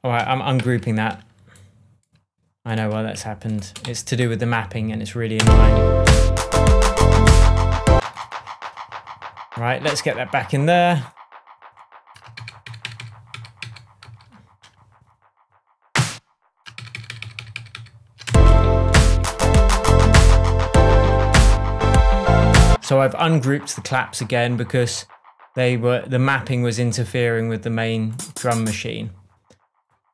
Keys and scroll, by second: 0.6 shift+super+g, 3.8 shift+Delete, 4.8 Delete, 5.3 space, 7.9 space, 12.3 super+d, 16.7 super+d, 18.2 super+space, 18.8 shift+Tab, 22.6 space.